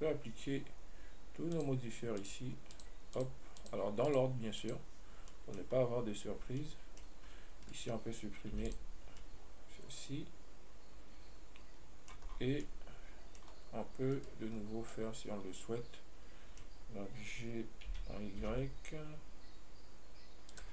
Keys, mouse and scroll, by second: 0.0 right click, 1.8 click, 2.5-3.1 drag, 3.4 click, 3.9 click, 4.3-5.1 drag, 5.5-6.0 middle drag, 6.0 scroll up 1, 6.6 scroll up 2, 6.9-7.9 middle drag, 7.9 right click, 8.8 x, 9.4-12.5 middle drag, 12.6-12.9 scroll down 5, 12.9-13.7 middle drag, 13.7 scroll up 3, 14.4 right click, 14.8 scroll up 2, 15.2-18.1 middle drag, 18.1 g.